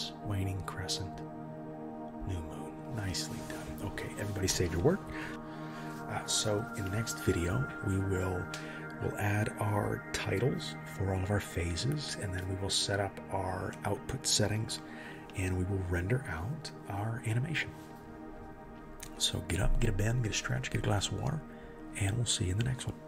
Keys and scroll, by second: 17.8 ctrl+s.